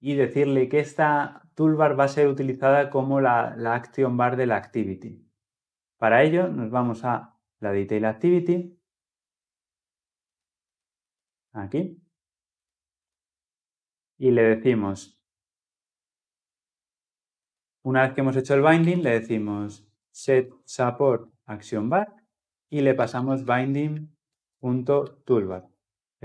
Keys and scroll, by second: 21.7 Return, 25.0 Return.